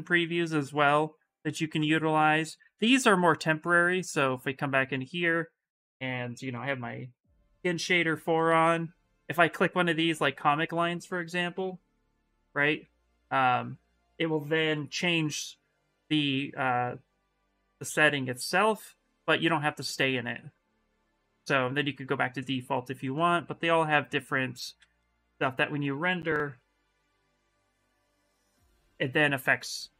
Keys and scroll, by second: 11.7 ,, 14.5 ,, 25.0 shift+r, 26.3 ,, 28.0 ,.